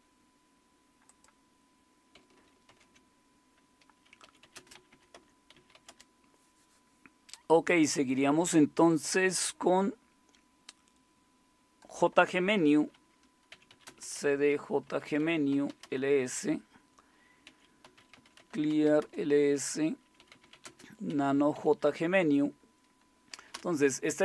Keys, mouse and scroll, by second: 1.1-2.7 drag, 2.7 ctrl+x, 4.0-7.6 typing, 13.3-16.0 typing, 17.2-21.5 typing, 23.5 typing.